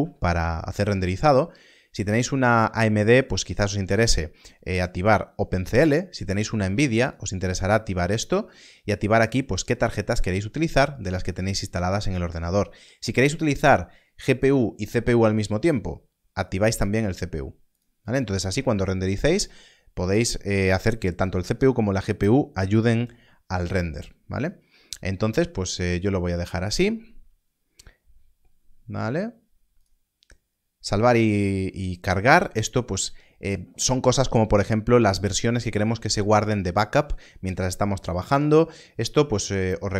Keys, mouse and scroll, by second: 2.9 click, 6.9 click, 16.4 click, 27.0-29.6 scroll down 1, 29.7 scroll down 1, 29.8 click.